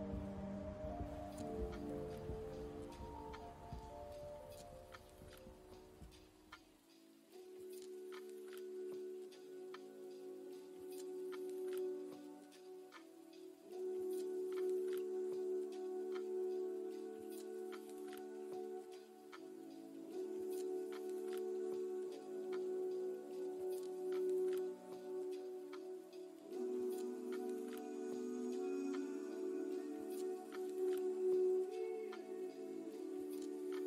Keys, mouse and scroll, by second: 2.7-3.1 scroll down 2, 3.1 middle click, 3.6 middle click, 4.1-4.8 scroll up 2, 5.6 click, 7.3-8.1 scroll up 2, 8.9 click, 9.9-10.6 scroll up 2, 10.6-11.0 scroll down 2, 11.8-12.1 scroll down 2, 12.9 click, 13.9 click, 16.1 click, 17.3-17.7 scroll down 3, 17.8 middle click, 18.9 scroll up 1, 19.5 middle click, 21.9 middle click, 23.2-23.8 scroll up 5, 24.3-24.8 scroll up 2, 24.8 scroll up 2, 26.1-27.2 scroll down 8, 27.2 middle click, 28.5 middle click, 30.1-30.5 scroll up 2, 30.5 middle click, 32.8-33.3 scroll down 1, 33.3-33.8 scroll up 2.